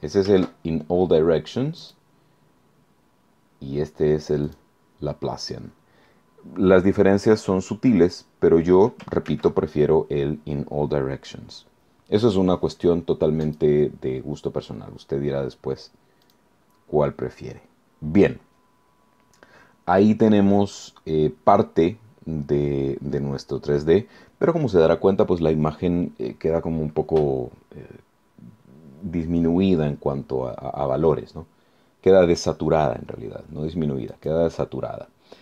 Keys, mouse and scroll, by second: 0.2 ctrl+z, 1.8 click, 4.4 click, 9.3 ctrl+z, 13.4 click, 16.2 click, 34.1 click.